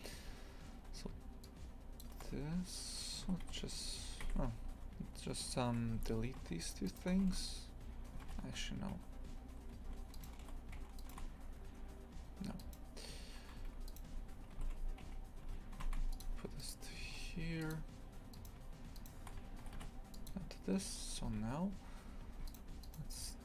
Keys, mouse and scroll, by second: 1.9 shift+click, 3.2 g, 5.8 2, 6.1 a, 6.6 alt+shift+right click, 6.8 alt+shift+right click, 7.2 ctrl+x, 8.4 ctrl+z, 10.1 alt+shift+right click, 10.9-13.5 alt+shift+right drag, 13.5 1, 13.8 right click, 14.5 g, 16.5 right click, 17.0 g, 18.3 right click, 19.6 g, 21.0 2, 21.3 a, 22.4 shift+right click, 22.8 shift+right click.